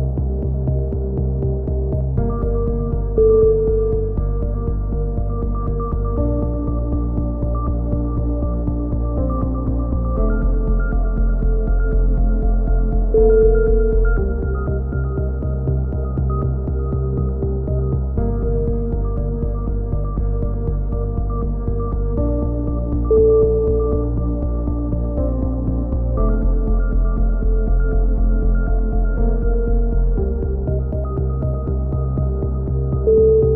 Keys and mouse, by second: 0.0-0.6 drag, 3.2 Tab, 4.2-7.1 drag, 7.1 z, 8.1 click, 8.1 z, 10.6 a, 10.7 click, 11.2 click, 12.2-12.8 drag, 13.5-14.0 right drag, 13.5 z, 14.0 KP_7, 15.0-15.6 drag, 16.0 a, 16.1 z, 16.3-16.9 drag, 17.4-18.6 middle drag, 18.6 ctrl+z, 18.7 ctrl+z, 18.9 a, 19.0-19.6 middle drag, 20.4-21.0 middle drag, 21.0 z, 21.5-22.1 middle drag, 22.1-23.2 middle drag, 22.9 KP_7, 23.2 z, 25.9-28.2 typing, 26.5-27.0 drag, 27.5 click, 29.0 ctrl+z, 29.5-32.6 typing, 30.3-31.4 drag, 32.9-33.5 drag.